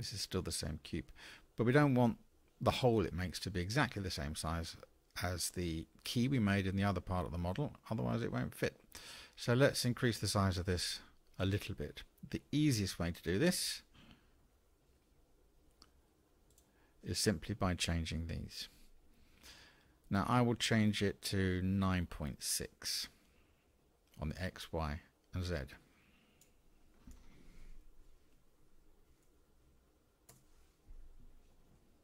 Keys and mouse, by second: 14.8 n, 25.5-31.5 drag.